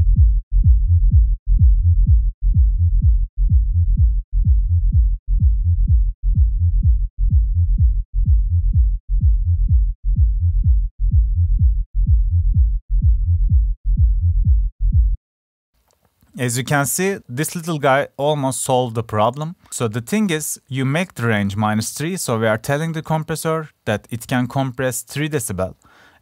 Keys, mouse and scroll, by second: 7.0 drag.